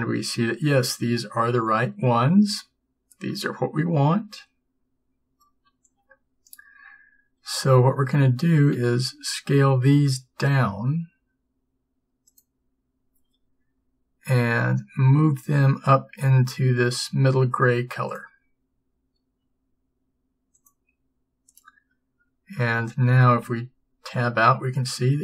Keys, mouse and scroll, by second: 3.5 middle click, 4.3 middle click, 8.1 middle click, 8.9 s, 13.8 g, 19.5 s, 22.7 a, 23.5 Tab.